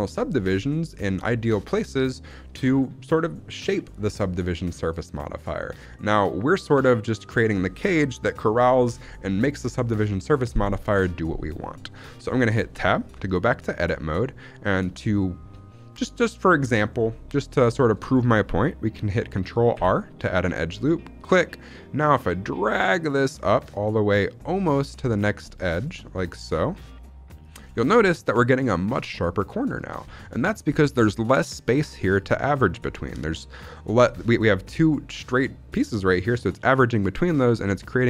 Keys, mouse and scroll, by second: 0.8-1.2 shift+middle drag, 11.6-12.1 shift+middle drag, 12.6 Tab, 13.2 shift+middle click, 13.6-14.0 scroll up 2, 14.0 shift+middle click, 14.6 shift+middle click, 14.8-15.6 scroll up 1, 15.6-16.2 scroll up 1, 16.9 shift+middle click, 18.1-19.1 scroll up 1, 19.6 ctrl+r, 27.3 click, 27.6 shift+middle click, 27.8-29.4 scroll up 1, 29.4-29.9 scroll up 3, 29.9 z, 30.3 shift+middle click, 30.5-32.9 scroll up 1, 32.9-33.3 scroll up 1.